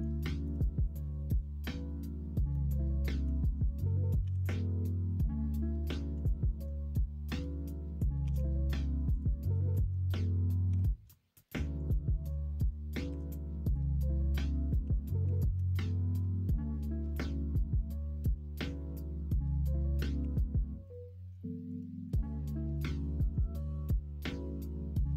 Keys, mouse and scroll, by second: 0.2 shift+middle click, 0.9 middle click, 2.5 middle click, 8.2 e, 9.7 alt+z, 10.6 2, 13.0 ., 14.6 s, 16.7 middle click, 17.0 alt+z, 17.3 middle click, 18.4 middle click, 20.2 3, 21.4 middle click, 21.8 middle click, 22.9 middle click, 23.7 middle click.